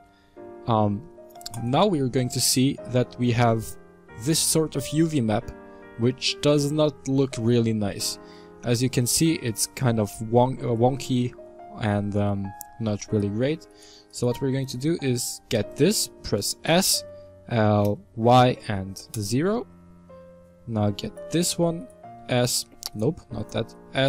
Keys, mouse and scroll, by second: 1.5 click, 12.9 alt+right click, 13.6-15.4 alt+right drag, 15.4 s, 20.9-21.8 alt+right drag, 22.1 s, 23.2 alt+right click, 23.8 s.